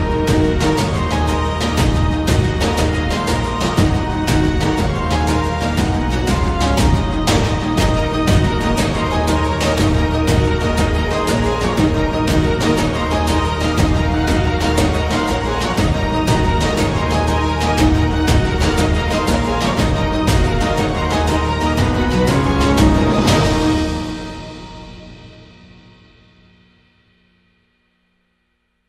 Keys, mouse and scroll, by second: 0.0-1.1 drag, 1.1 middle click, 1.5 a, 1.6 a, 3.7 click, 3.7 a, 5.1 shift+Tab, 5.5 g, 8.8 middle click, 9.4 shift+middle click, 11.7 click, 13.4 Tab, 14.0 z, 15.4 z, 16.3 Tab, 16.6 a, 16.8 a, 17.1 ctrl+r, 18.9 click, 19.7 click, 20.4 middle click, 21.3 click, 22.0 click, 22.3 middle click, 24.6 shift+middle click, 25.4 middle click, 26.1 g.